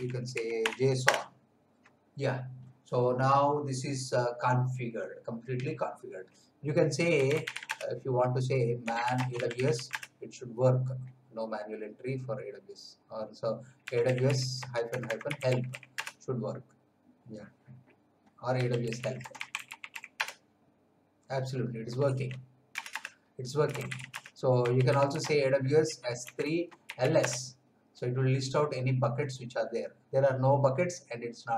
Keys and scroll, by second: 0.0-1.1 typing, 6.9-10.2 typing, 13.5-16.2 typing, 18.3-20.4 typing, 22.0 q, 22.7 Return, 23.4-27.5 typing.